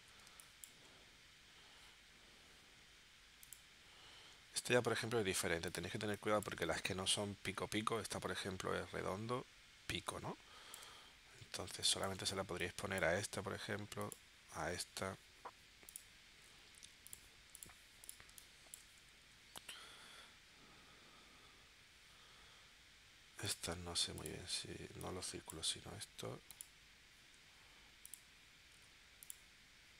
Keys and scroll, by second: 0.3 space, 6.0 space, 10.0 space, 11.7 space, 18.3 space.